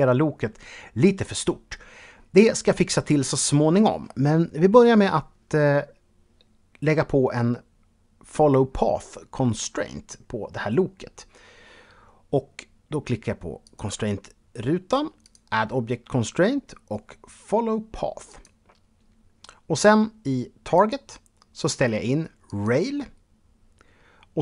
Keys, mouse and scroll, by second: 0.8-2.8 scroll up 2, 13.2 click, 14.8 click, 17.8 click, 20.3 click.